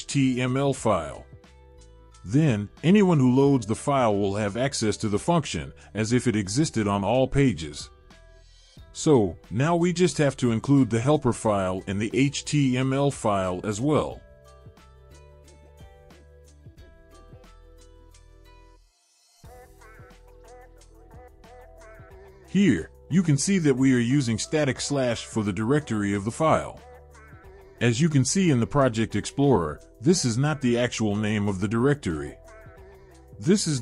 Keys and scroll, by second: 4.7-7.4 typing, 7.6 Return, 9.7 ctrl+v, 11.2 BackSpace, 18.8 Return, 19.3 ctrl+v, 23.1-24.7 typing, 26.4 ctrl+s.